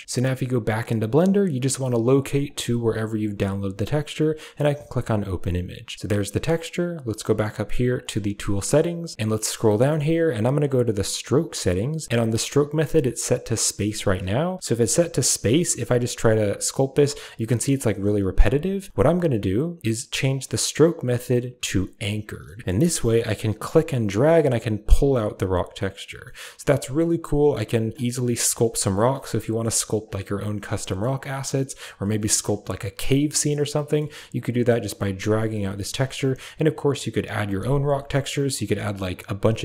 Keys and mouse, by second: 2.4 click, 4.6 click, 7.9 click, 14.8 f, 15.9-18.1 drag, 18.5 ctrl+z, 20.3-22.0 drag, 22.6 middle click, 23.4-26.0 drag, 26.3 middle click, 27.4 click, 28.3 click, 29.1 middle click, 30.1 click, 30.8 middle click, 31.4 click, 32.3 middle click, 32.7 click, 33.5 middle click, 34.3-35.5 drag, 35.6 middle click, 36.3 click, 38.1 middle click.